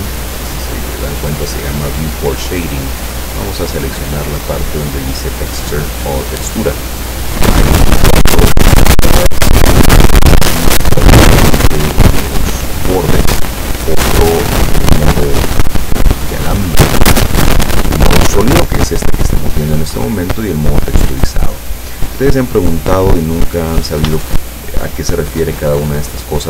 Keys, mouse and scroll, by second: 19.9 click, 21.8 right click, 24.3 shift+middle click.